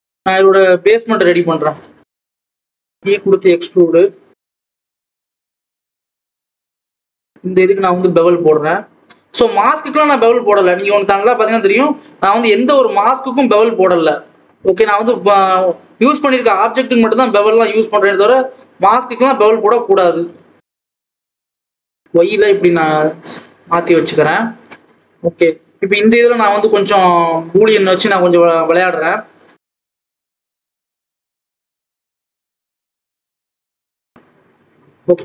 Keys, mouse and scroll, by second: 0.3 click, 1.1-1.7 scroll up 1, 1.7 click, 1.9-2.2 scroll down 1, 2.2 3, 2.4 click, 2.5 scroll down 1, 2.8-3.3 scroll up 1, 3.3 e, 4.5 click, 5.0 2, 5.2 click, 5.4 g, 6.5 Tab, 7.9-11.5 drag, 11.5-12.0 scroll up 1, 12.0 click, 12.2 scroll up 1, 12.5 scroll down 1, 12.7-13.3 scroll up 1, 13.3 click, 14.2 g, 16.6 scroll up 1, 16.7 alt+a, 16.8-17.3 scroll down 4, 17.3 click, 17.5-18.1 scroll up 1, 18.1 3, 18.2 click, 19.0-20.4 drag, 20.4 s, 21.5 scroll down 1, 21.8 click, 23.3 scroll up 2, 24.4 scroll down 1, 24.5 Tab, 25.1 click, 25.3 scroll up 2, 25.5 Tab, 25.8-26.6 scroll down 1, 26.6 click, 27.9 click, 29.5 shift+s, 29.7 click, 30.0 ctrl+b, 31.2 Tab, 31.3-31.8 scroll down 2, 31.8 scroll up 1, 32.0 click, 34.9 shift+a, 35.1 scroll down 1.